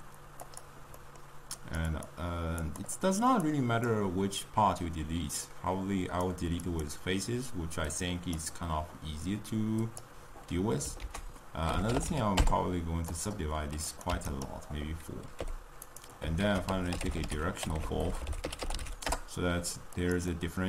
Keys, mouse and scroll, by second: 0.4 ctrl+a, 2.7-9.9 drag, 13.0 ctrl+a, 14.2 click, 15.3 g.